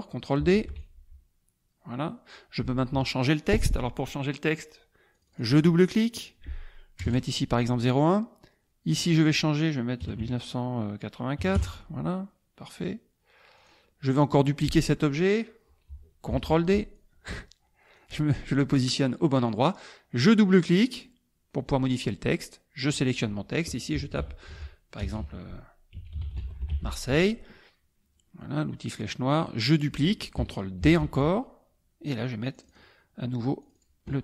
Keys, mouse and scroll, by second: 0.5 ctrl+d, 0.9-2.5 ctrl+drag, 5.1 click, 7.0 KP_0, 7.0 KP_1, 9.0 click, 10.0 KP_1, 10.2 KP_9, 11.4 KP_8, 11.5 KP_4, 13.5 click, 16.3 ctrl+d, 16.9-18.1 ctrl+drag, 18.8-20.1 drag, 20.8 click, 22.8 click, 24.1-27.2 typing, 28.9 click, 30.8 ctrl+d, 31.2-32.9 ctrl+drag, 33.6 click.